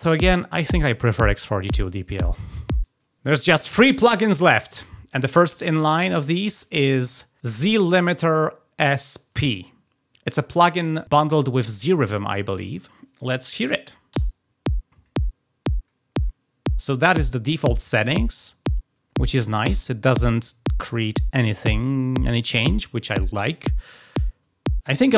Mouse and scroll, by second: 7.3 click.